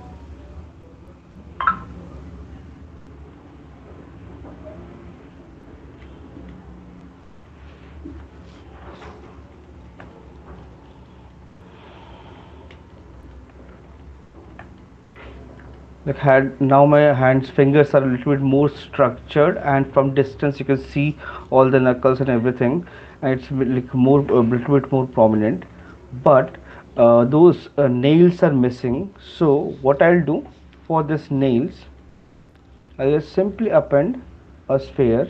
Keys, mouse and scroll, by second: 0.3 shift+click, 0.9 shift+click, 1.3 shift+click, 2.1 shift+click, 3.0 shift+click, 3.6 shift+click, 4.0 shift+click, 4.6 shift+click, 4.8 shift+click, 5.2 shift+click, 5.8 shift+click, 6.4 click, 7.1 shift+click, 7.4 shift+click, 8.2 alt+click, 9.0 f, 10.0 click, 10.7 click, 11.2 click, 11.8 alt+click, 12.0 shift+click, 12.5 right click, 12.5 alt+click, 13.1 click, 15.0 right click, 15.6 alt+click, 16.9 alt+click, 18.3 alt+click, 18.9 click, 24.2 alt+click, 24.3 right click, 25.3 shift+click, 26.5 right click, 27.9 alt+click, 32.2 click.